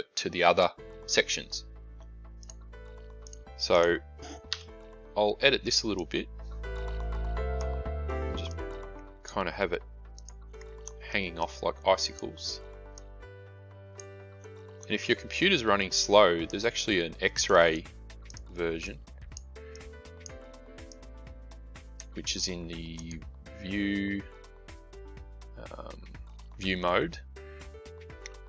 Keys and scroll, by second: 4.4 a.